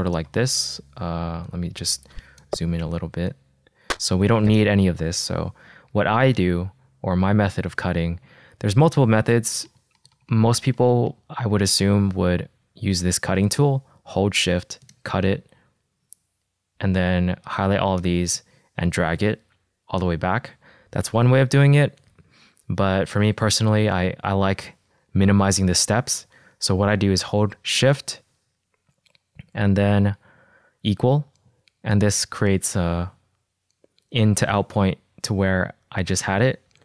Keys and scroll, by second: 0.3 -, 3.1 =, 7.8 -, 12.7 r, 17.3 v, 21.4 super+z, 25.7 super+z, 30.7 =.